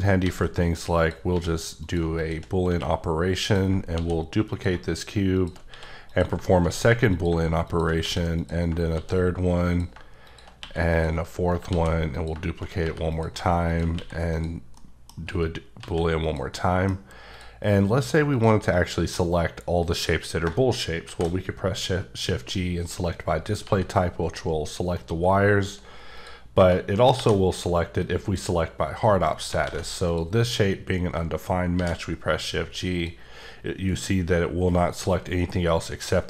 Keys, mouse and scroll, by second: 0.2 shift+a, 1.0 click, 1.3 s, 1.8 click, 2.7 q, 3.4 click, 3.9 shift+d, 4.5 click, 5.7 q, 6.1 click, 6.6 d, 7.7 click, 8.0 q, 8.4 click, 8.9 d, 9.7 click, 10.6 q, 10.9 click, 11.8 d, 12.1 click, 12.8 g, 13.1 click, 14.0 q, 14.4 click, 14.8 middle click, 15.2 g, 15.8 z, 16.2 click, 16.5 middle click, 17.3 click, 18.3 click, 20.9 shift+click, 21.0 shift+g, 22.2 click, 23.6 g, 25.0 right click, 26.2 click, 27.2 shift+g, 28.0 click, 29.7 alt+a, 30.1 click, 31.8 shift+g, 32.9 click.